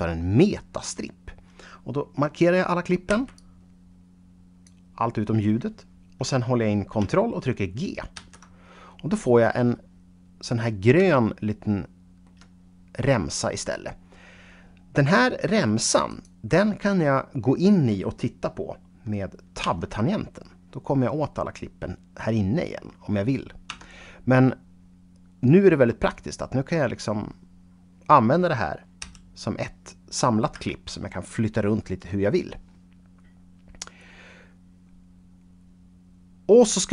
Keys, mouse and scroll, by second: 3.0 b, 3.2-6.4 drag, 8.0 ctrl+g, 10.9-12.3 shift+middle drag, 16.0 click, 19.5 Tab, 23.6 Tab, 24.7 scroll down 1, 26.0 click, 28.9 g, 30.4 Escape.